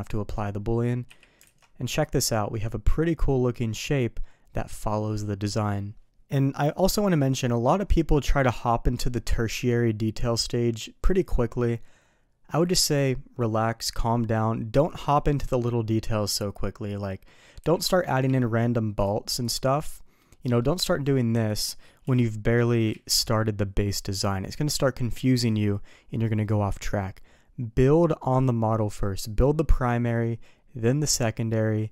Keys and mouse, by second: 1.0 KP_3, 1.4 alt+a, 18.2 d, 19.4-21.5 drag, 19.9-20.4 middle drag, 22.0 KP_3, 22.9 ctrl+z.